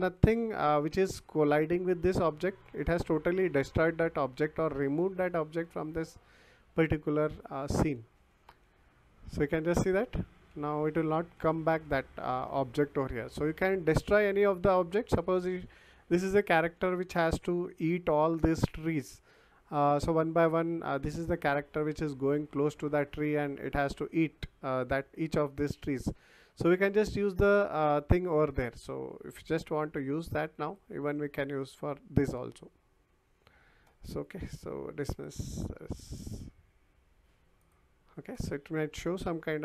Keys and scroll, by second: 1.1 a, 1.6 w, 2.5 s, 3.8 d, 4.4 w, 5.6 d, 6.0 w, 7.6-13.9 typing, 16.1 a, 16.7 w, 17.3 a, 21.0 w, 23.3 s, 25.5 Escape.